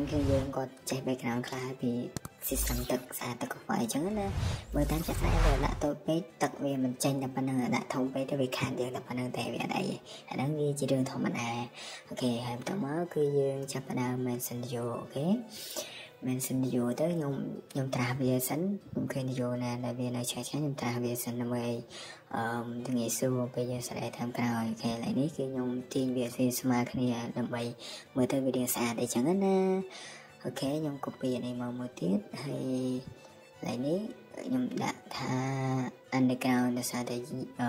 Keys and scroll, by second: 0.0-1.8 typing, 3.6 Escape, 3.7 Escape, 4.7 m, 4.8 space, 7.4 Escape, 8.3-8.8 typing, 15.5 Escape, 15.9 Escape, 23.7 Escape, 24.2 Escape, 25.9 Escape, 28.2-28.5 typing, 29.6 Escape, 29.6 typing, 29.8 Escape, 33.1 space, 34.8-36.3 typing, 37.0 Right, 37.1 Right.